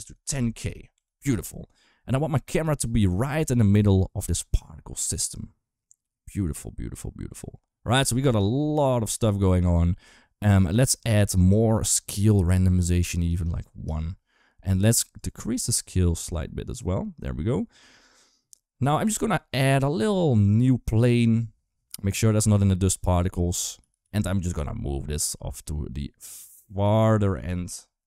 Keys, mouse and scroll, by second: 0.1 0, 2.8 click, 3.1 space, 8.0 space, 8.8 click, 13.1 click, 14.9-17.5 shift+drag, 18.8 shift+a, 23.6 g, 27.1 r.